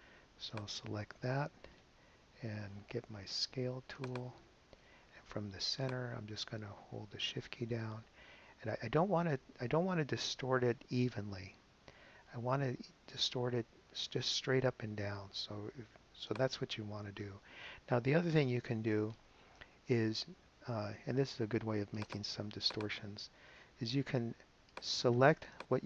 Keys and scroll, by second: 17.2 shift+super+z.